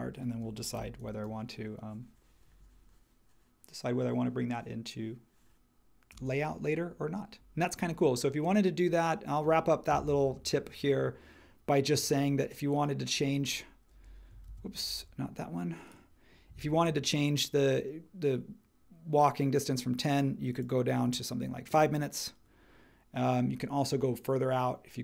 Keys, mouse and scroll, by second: 0.4 space, 0.7 h, 6.1 space, 14.5 super+w.